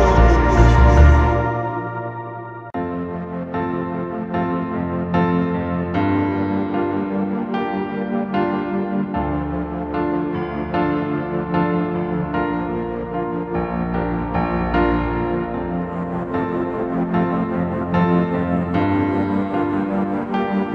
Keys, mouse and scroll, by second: 1.6 ctrl+t, 4.0 alt+shift+click, 6.6 alt+shift+click, 17.3 alt+shift+click.